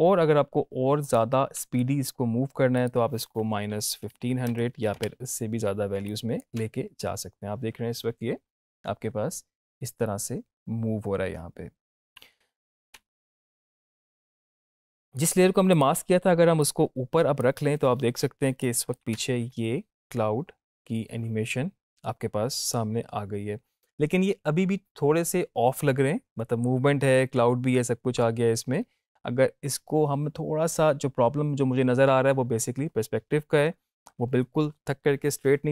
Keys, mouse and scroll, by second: 0.9 click, 5.9-6.6 click, 6.5 space, 12.9 space, 15.0-17.5 drag, 19.1 space, 32.7 space.